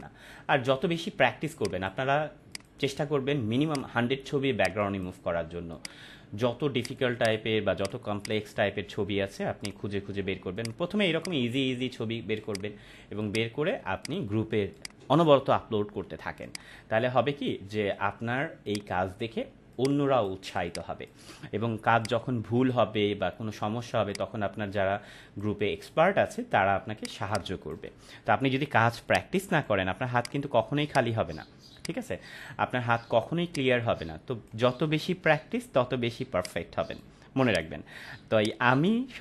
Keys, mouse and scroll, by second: 1.8 drag, 14.5 space, 14.7 click, 15.0 space, 16.4-17.7 drag, 20.5 space, 20.6-21.3 click, 21.0 space, 22.0-22.9 click, 27.1 space, 27.3-27.8 click, 27.7 space, 29.0-29.7 drag.